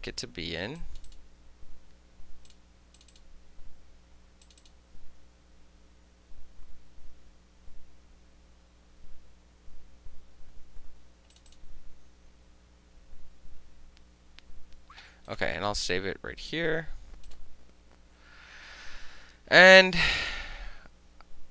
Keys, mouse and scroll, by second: 0.8 click, 1.1 click, 1.2-3.2 middle drag, 2.5 click, 3.0 click, 3.2 click, 3.2-4.5 middle drag, 4.5 click, 4.6-11.0 middle drag, 4.7 click, 11.4 click, 11.5 click, 15.3 click, 16.3-17.3 middle drag, 17.3 click, 17.4-20.3 middle drag, 20.1 click.